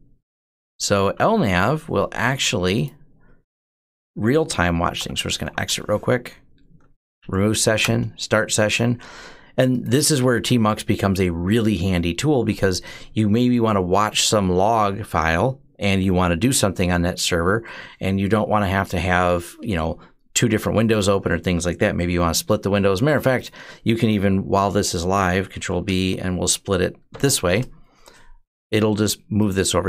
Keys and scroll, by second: 4.5-5.9 typing, 7.0 Up, 7.6 Return, 25.4 ctrl+b, 26.9 %.